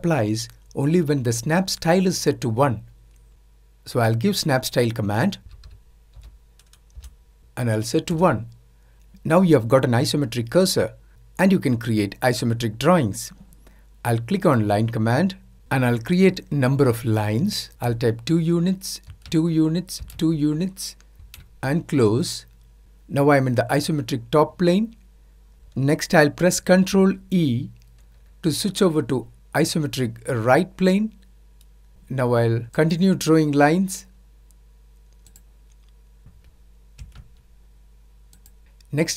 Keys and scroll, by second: 4.0-5.3 typing, 8.8 typing.